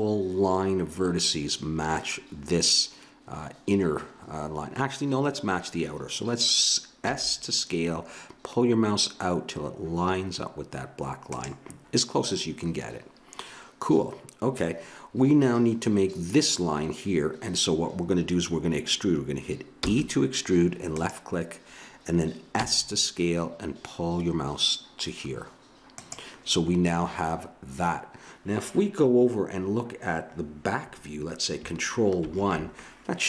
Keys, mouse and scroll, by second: 7.0 s, 19.8 e, 22.5 s, 27.4-29.7 middle drag, 32.2 ctrl+KP_1.